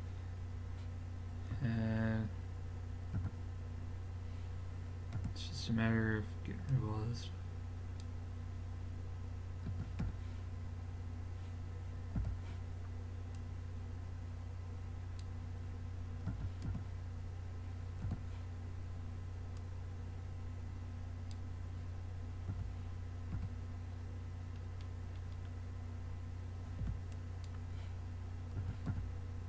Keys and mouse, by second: 1.6 a, 3.2 z, 5.2 b, 9.7 x, 12.2 b, 16.3 x, 18.0 b, 22.5 x, 25.7-27.1 middle drag, 26.8 b, 28.6 x.